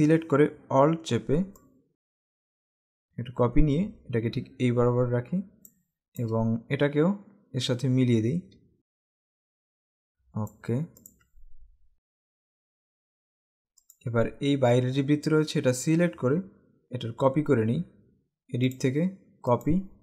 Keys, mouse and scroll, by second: 1.7 click, 6.0 click, 6.2 space, 7.1 scroll up 2, 8.7 scroll down 1, 9.0 click, 11.0 click, 11.6 alt+scroll up 1, 12.7-13.2 alt+scroll down 2, 12.9 click, 13.0 space, 13.3 space, 13.4 click, 13.4 space, 13.9 click, 18.9 click.